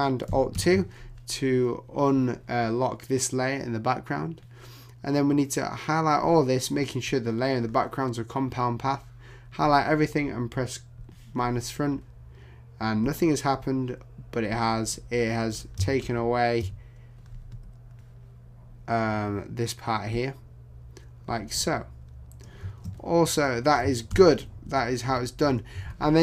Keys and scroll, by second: 0.5 alt+super+2, 24.1 super+0, 24.6 super+-, 25.4 super+=.